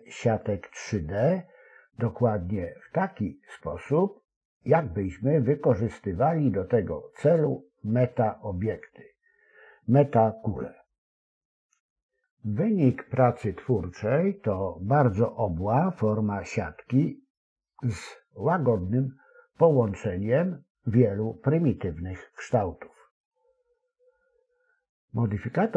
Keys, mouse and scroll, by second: 1.6 s, 9.5 s, 18.3 ctrl+r, 21.5 s.